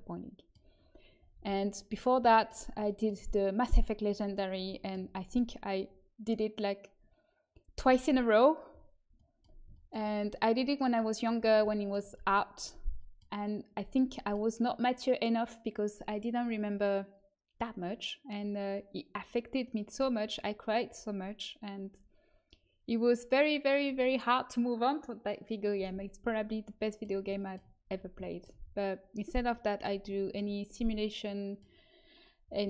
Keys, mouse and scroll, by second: 1.3 a, 17.1-32.6 middle drag.